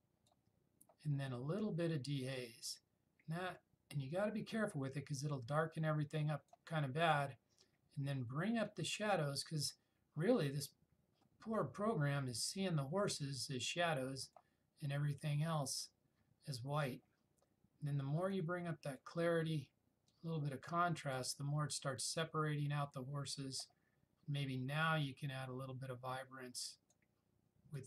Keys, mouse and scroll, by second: 8.8-14.7 drag, 18.4-19.4 drag, 25.1-27.3 drag.